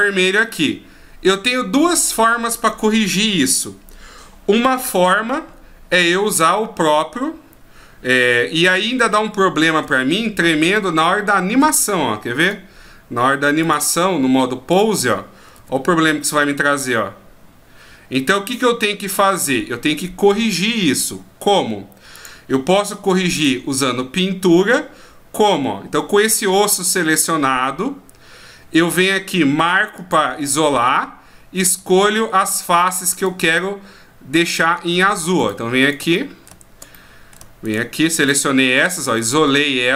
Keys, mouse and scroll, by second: 9.8 Tab, 10.6 right click, 11.5 Tab, 12.4 right click, 13.6 click, 15.6 r, 22.2 click, 23.0 click, 23.3 right click, 30.0 click, 32.6 shift+right click, 33.1 shift+right click, 33.6 middle click, 35.4 shift+right click, 35.8 shift+right click, 36.2 middle click, 36.9 middle click, 37.6 shift+right click, 38.2 shift+right click, 38.8 shift+right click, 39.2 shift+right click.